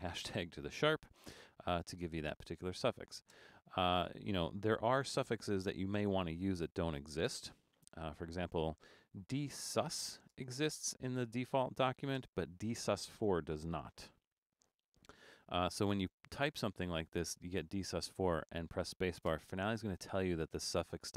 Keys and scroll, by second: 8.5-10.5 typing, 12.2 space, 13.5-15.4 typing, 19.4 space.